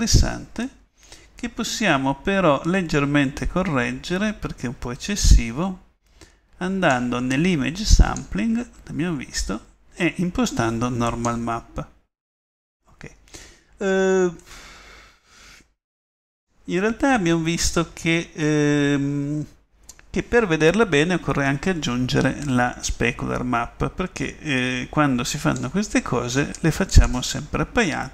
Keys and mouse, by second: 16.2-17.3 drag, 22.1 middle click.